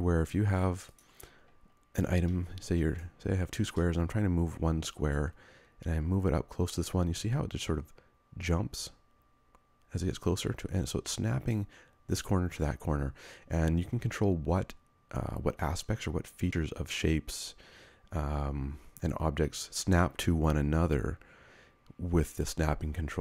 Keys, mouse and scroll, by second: 3.5 space.